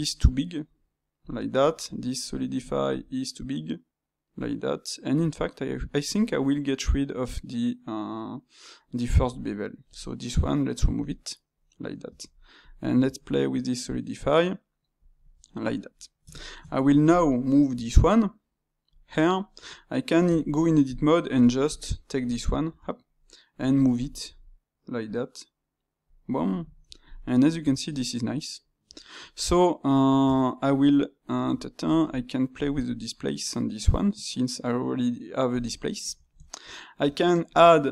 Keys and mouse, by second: 15.9-17.7 middle drag, 17.7 g, 19.1-19.5 middle drag, 19.5 Tab, 20.2 Tab, 20.8 click, 21.1-22.6 shift+middle drag, 22.6 Tab, 26.4-27.5 middle drag, 27.5 Tab, 27.9-30.1 middle drag, 30.1 Tab, 31.3 Tab, 31.9 space, 35.7-37.9 middle drag.